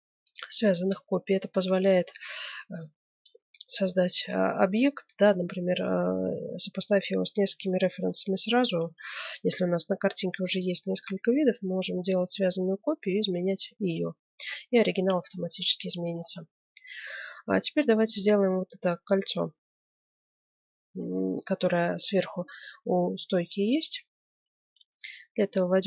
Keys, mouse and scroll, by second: 1.5-3.8 middle drag, 4.3-7.3 middle drag, 7.6-8.8 middle drag, 8.8 KP_1, 11.2-23.5 middle drag, 24.3 Tab.